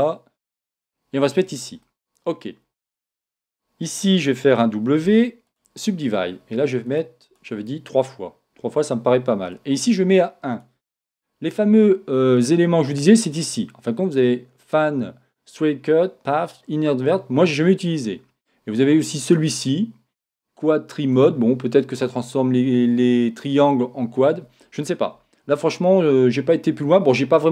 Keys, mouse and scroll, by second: 1.8-3.5 middle drag, 3.1 Tab, 5.0 w, 6.8 click, 9.5 click, 12.9 click, 19.2 click.